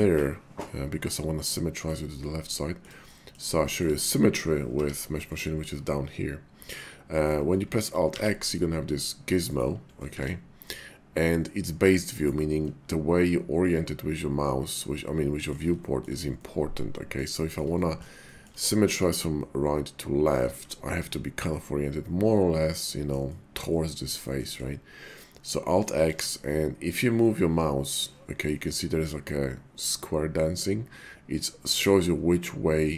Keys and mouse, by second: 1.1 middle click, 2.5 shift+middle click, 3.0 middle click, 3.6 shift+middle click, 4.6 y, 8.0 alt+x, 9.5 right click, 10.0 alt+x, 12.2 right click, 12.6-15.5 middle drag, 15.8 shift+middle click, 16.4 middle click, 17.4 shift+middle click, 17.8 middle click, 18.2 shift+middle click, 20.9-23.1 middle drag, 24.3 middle click, 26.1 alt+x.